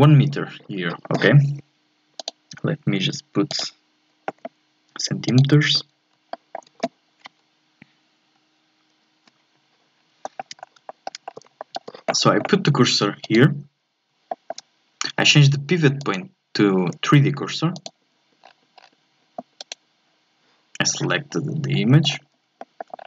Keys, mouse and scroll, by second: 2.2 click, 3.5-6.1 drag, 6.1 scroll down 1, 6.3-9.0 shift+middle drag, 9.0 alt+F11, 10.0 scroll down 1, 10.2 shift+middle click, 10.6 scroll up 1, 10.9 shift+middle click, 11.2-11.6 scroll up 1, 11.6-13.2 shift+middle drag, 13.2-14.3 drag, 14.3-16.0 shift+middle drag, 16.0-18.4 drag, 18.4-19.6 scroll down 8, 19.6-21.3 right drag, 21.3-22.6 scroll up 6, 22.6 shift+middle click, 22.9 scroll up 1.